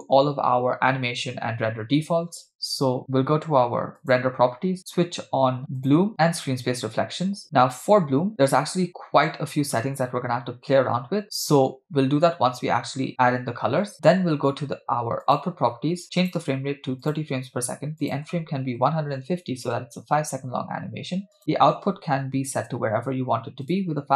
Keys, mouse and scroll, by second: 4.0 click, 5.8 click, 6.4 drag, 8.3 click, 15.3 click, 16.2-17.3 drag, 18.0-19.7 drag, 20.7 scroll down 2, 21.4-22.7 drag, 22.2 /, 23.7-24.1 drag.